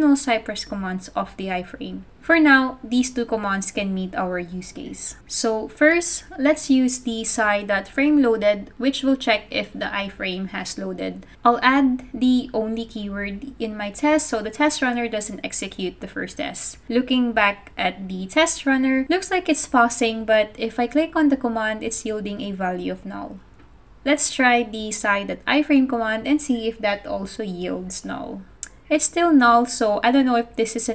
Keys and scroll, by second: 8.7-10.7 typing, 12.1 super+c, 12.5 super+v, 13.1-13.8 typing, 15.1-16.2 typing, 16.4 super+Tab, 16.9 super+Tab, 28.3-29.3 typing, 29.5 super+s.